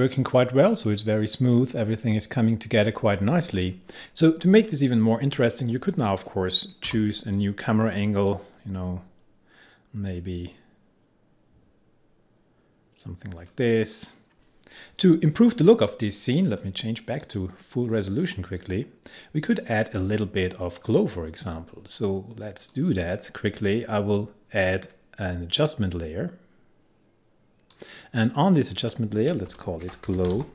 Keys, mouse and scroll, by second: 4.0-5.6 drag, 6.0 click, 6.9 r, 8.4-14.3 drag, 16.6 click, 19.4-20.9 scroll up 1, 20.9-22.1 scroll down 1, 22.8-24.7 drag, 27.8 click, 29.5 Return, 29.7-30.5 typing.